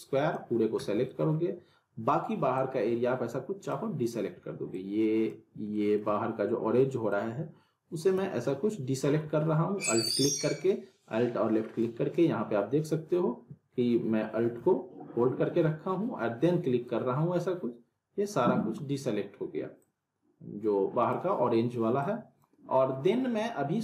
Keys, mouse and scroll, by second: 0.8 middle click, 1.0 scroll up 1, 2.6-3.8 alt+drag, 5.7 middle click, 7.1-8.0 alt+drag, 8.8-9.4 middle drag, 9.9-12.1 drag, 14.2-16.8 middle drag, 16.8-19.0 alt+drag.